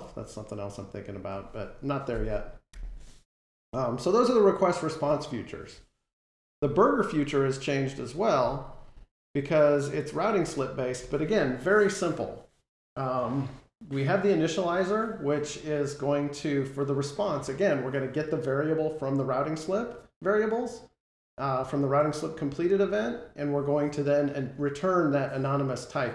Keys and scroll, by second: 2.6 super+-.